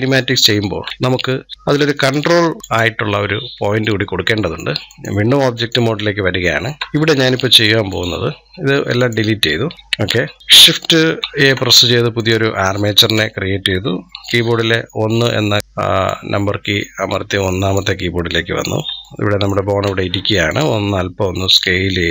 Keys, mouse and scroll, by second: 0.3 ctrl+z, 0.9 ctrl+z, 1.5-1.8 scroll down 3, 1.8-2.6 drag, 6.2 scroll up 2, 6.8-7.7 shift+middle drag, 7.7-9.7 drag, 9.7 Delete, 10.2 shift+middle click, 11.2 shift+a, 14.1 KP_1, 14.9-15.2 scroll up 1, 15.6-18.4 drag, 18.4-18.9 scroll down 1, 18.9-20.3 shift+middle drag, 20.3-22.1 drag.